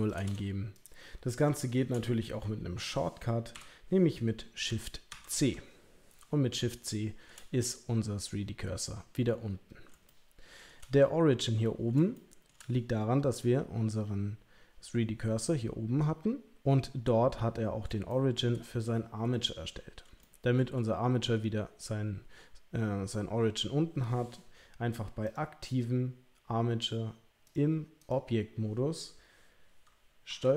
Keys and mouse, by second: 0.0 click, 0.7 click, 1.7 shift+right click, 3.5 n, 5.1 shift+c, 6.8 shift+middle click, 10.1 shift+middle click, 12.1 shift+middle click, 18.1 shift+middle click, 20.3 shift+middle click, 27.5 click, 30.4 ctrl+a.